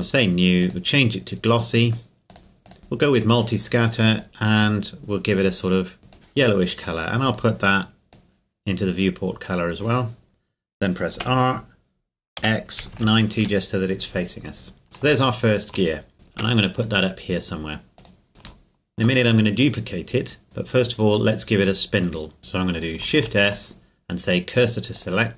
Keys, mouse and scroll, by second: 0.0 click, 11.2 r, 12.4 x, 12.9 KP_9, 13.4 KP_Enter, 14.2-14.8 scroll down 2, 14.8 scroll up 2, 15.3 shift+middle click, 16.3 shift+middle click, 16.5 g, 18.0 click, 18.6 shift+middle click, 21.3 middle click, 22.4 shift+s, 23.2 shift+s, 25.0 click.